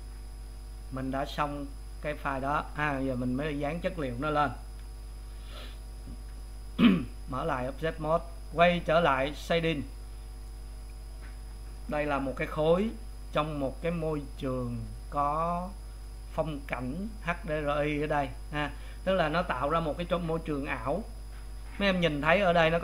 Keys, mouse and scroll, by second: 4.8 w, 6.3 Tab, 9.6 click, 11.9-22.2 middle drag.